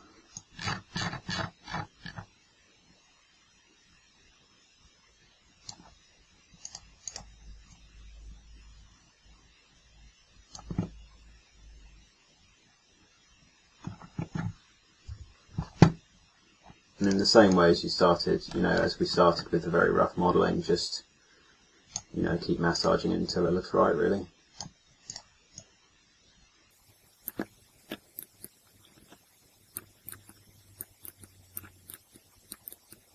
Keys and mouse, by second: 6.7-7.7 drag, 12.7-14.3 middle drag, 15.1 KP_3, 22.3-24.5 middle drag, 24.5 click, 26.8 click, 27.4 middle click, 28.1 click, 30.1 click.